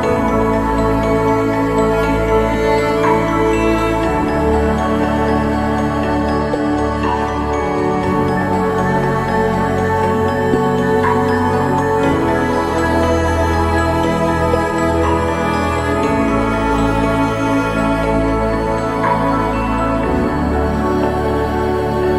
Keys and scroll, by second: 17.2 ctrl+=, 17.6 ctrl+=.